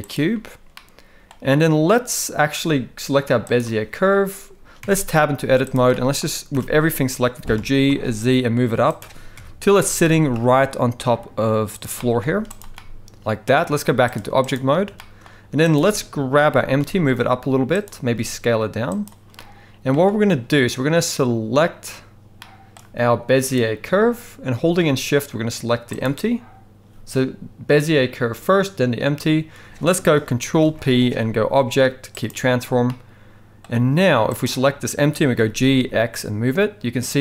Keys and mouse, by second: 0.7-1.3 middle drag, 3.5 click, 5.4 Tab, 5.4 z, 5.9 middle click, 6.5 a, 7.5 g, 9.3 KP_1, 10.4 g, 11.9 middle click, 12.4 z, 12.7 middle click, 14.2 click, 15.0 shift+middle click, 15.7 click, 16.5 g, 18.1 s, 19.4 middle click, 22.4-22.7 shift+middle drag, 23.4 click, 26.0 shift+click, 30.6 ctrl+p, 32.9 middle click, 34.4 click, 35.4 g.